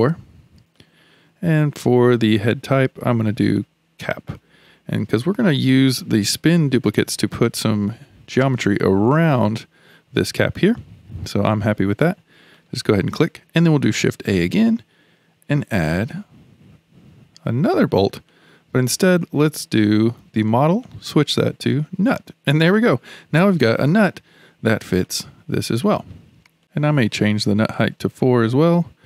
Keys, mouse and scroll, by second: 2.3-4.9 drag, 4.9-8.0 middle drag, 10.8-12.6 shift+middle drag, 12.6 click, 14.1 shift+a, 20.8-23.9 drag, 25.0-27.2 middle drag, 27.2-28.8 drag.